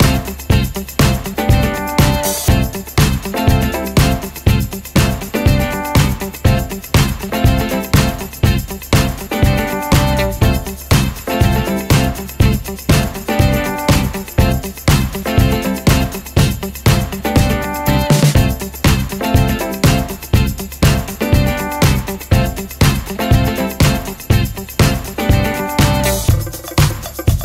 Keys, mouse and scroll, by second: 0.9 ctrl+z, 1.4 ctrl+space, 1.9 click, 3.2 right click, 3.8 click, 6.3 scroll down 1, 7.0 ctrl+alt+click, 10.6 ctrl+right click, 11.8-14.3 drag, 15.5 scroll up 1, 16.5 scroll down 1, 17.1 click, 19.5 right click, 20.1-20.7 scroll up 1, 20.9-27.4 drag.